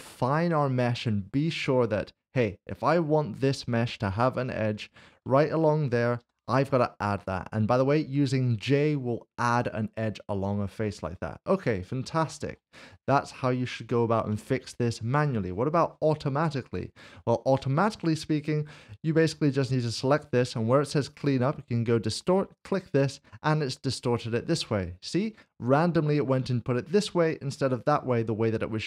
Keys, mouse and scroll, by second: 0.5 middle click, 3.8 click, 4.2 s, 4.9 shift+click, 6.2 l, 7.6 j, 10.0 j, 10.0 middle click, 12.1 shift+middle click, 13.0-14.0 scroll up 1, 14.0 scroll down 1, 14.4 shift+middle click, 16.8 ctrl+z, 19.2 Tab, 22.6 Tab, 22.6 click, 23.8 middle click, 28.4 middle click.